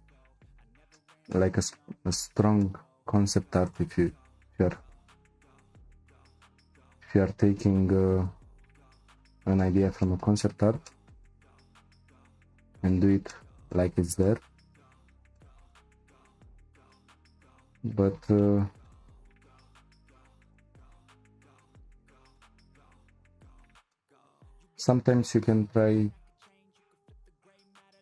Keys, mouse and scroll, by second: 0.9-3.6 shift+middle drag, 3.6 click, 4.7 ctrl+z, 5.5 shift+click, 6.7 c, 9.6-12.9 middle drag, 12.9-13.3 scroll down 2, 13.3-14.8 shift+middle drag, 14.8-15.4 scroll up 2, 15.4-16.5 shift+middle drag, 16.5-16.9 scroll down 1, 16.9-23.3 shift+middle drag, 23.3-23.8 scroll up 2, 23.9-27.3 shift+middle drag, 27.3-27.8 scroll down 2, 27.8-28.0 shift+middle drag.